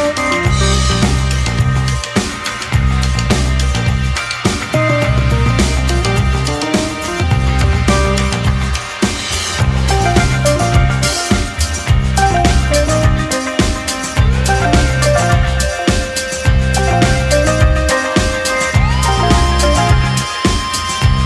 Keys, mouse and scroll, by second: 3.3 2, 4.4 click, 5.4 alt+click, 6.0 click, 7.2-8.6 middle drag, 8.6 ctrl+click, 10.3 ctrl+click, 10.7 middle click, 11.4 g, 18.1-18.6 scroll down 2, 18.6-19.9 middle drag, 19.9 KP_1, 20.8 KP_3.